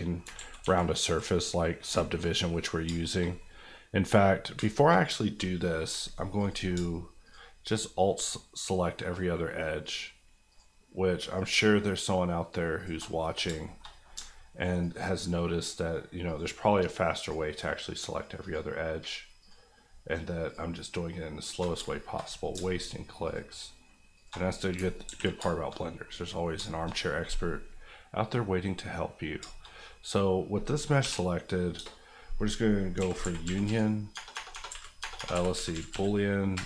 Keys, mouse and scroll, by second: 0.3 ctrl+middle click, 0.3 ctrl+z, 1.2 middle click, 1.9 shift+middle click, 2.2 middle click, 2.8 shift+middle click, 3.3 middle click, 4.5 shift+middle click, 5.8 alt+middle click, 6.4 alt+click, 6.7 alt+shift+click, 10.5 alt+shift+click, 11.3 alt+shift+click, 13.1 shift+middle click, 13.6 shift+middle click, 13.8-14.2 shift+scroll up 4, 14.8 alt+shift+click, 16.2 alt+shift+click, 18.4 alt+shift+click, 19.4 alt+shift+click, 21.2 alt+click, 21.4 alt+shift+click, 21.9-22.3 shift+scroll down 2, 22.3-23.2 scroll up 2, 23.2 alt+shift+click, 24.5-25.0 scroll down 2, 25.0 ctrl+x, 25.4 shift+middle click, 25.7 middle click, 26.5 shift+middle click, 26.9 middle click, 27.0 scroll up 1, 27.2 middle click, 29.1-29.6 scroll down 3, 29.6 shift+middle click, 31.0 l, 31.8 space, 32.9-35.9 typing, 36.5 Return.